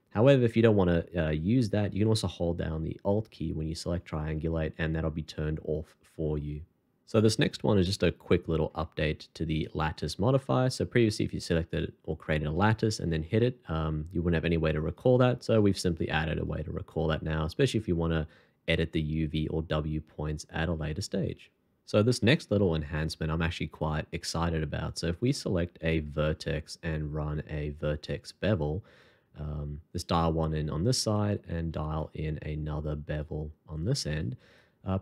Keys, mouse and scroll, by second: 1.6 alt+t, 3.9 alt+click, 8.4 shift+2, 10.1 scroll up 1, 13.0 h, 13.4 middle click, 15.6 shift+2, 17.7 scroll down 1, 19.9 scroll up 1, 26.1 shift+2, 29.9 alt+click, 32.2 shift+2, 34.5 double click.